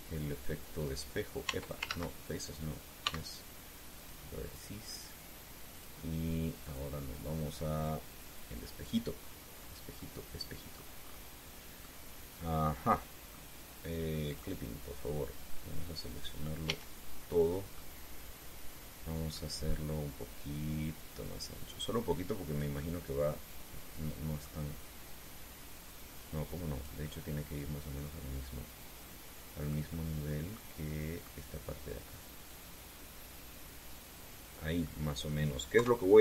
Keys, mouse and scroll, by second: 0.5 shift+x, 1.5 click, 2.6 ctrl+z, 3.7 x, 4.7 click, 6.5 click, 7.3 click, 9.5 click, 10.3-10.6 scroll down 2, 10.7-11.7 middle drag, 11.7 scroll down 2, 11.7 scroll up 2, 12.5-14.2 middle drag, 15.0 click, 17.4 a, 18.5-20.3 middle drag, 21.1-23.5 drag, 23.5-25.3 middle drag, 26.6-30.6 drag, 27.7-30.6 middle drag, 33.2-35.5 drag, 35.5 middle click.